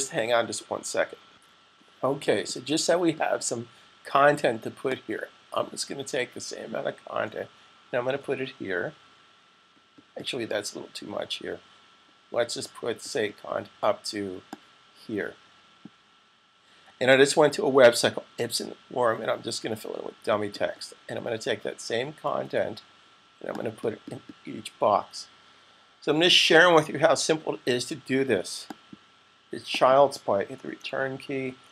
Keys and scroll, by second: 1.0-1.7 typing, 8.0 super+v, 26.8 super+c, 31.2 v.